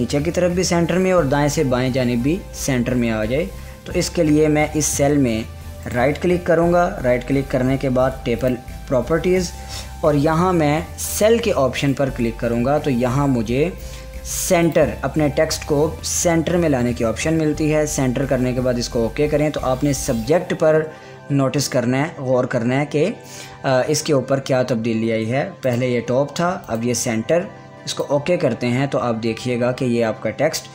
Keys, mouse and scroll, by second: 6.4 right click, 9.0 click, 12.3 click, 15.2 click, 26.2 click.